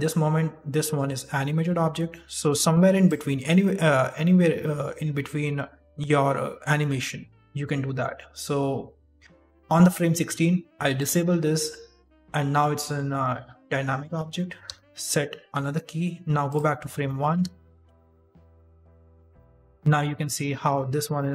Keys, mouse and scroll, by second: 2.3 click, 10.8 click, 14.5 i, 16.4 click, 17.0 middle click, 17.2 shift+space, 17.8-18.6 scroll down 6, 19.3 right click, 19.6 d, 20.4 shift+space, 21.1 middle click.